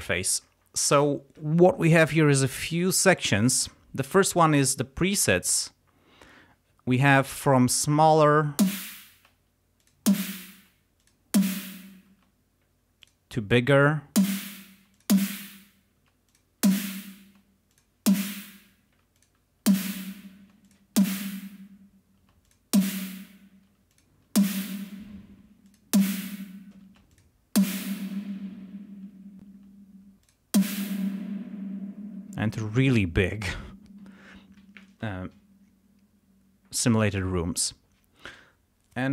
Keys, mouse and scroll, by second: 7.5 click, 8.6 space, 9.8 click, 10.1 space, 11.0 click, 11.4 space, 12.1 space, 13.0 click, 14.2 space, 15.0 click, 16.0 space, 16.3 click, 16.7 space, 17.7 click, 18.1 space, 19.2 click, 19.7 space, 20.4 space, 20.7 click, 21.0 space, 22.2-25.4 typing, 22.5 click, 23.9 click, 25.7 click, 26.9 space, 27.1 click, 27.6 space, 29.5 space, 30.2 click, 30.6 space.